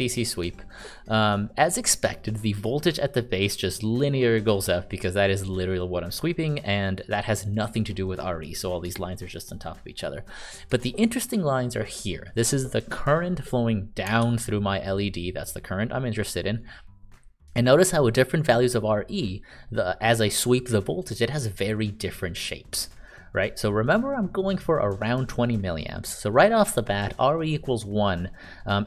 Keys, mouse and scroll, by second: 14.2-16.2 ctrl+d.